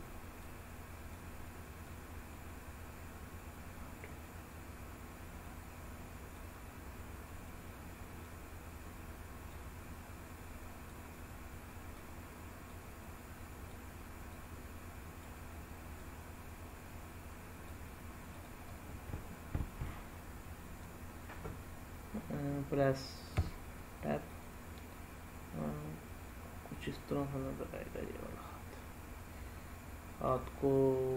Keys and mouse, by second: 0.3 click, 1.7-5.3 drag, 6.3-7.4 drag, 8.2-9.4 drag, 10.9-11.9 drag, 12.6-13.6 drag, 14.3 click, 16.0-17.6 drag, 18.3 click, 18.6-19.8 middle drag, 23.3 Tab, 24.3 click, 24.7-30.2 middle drag.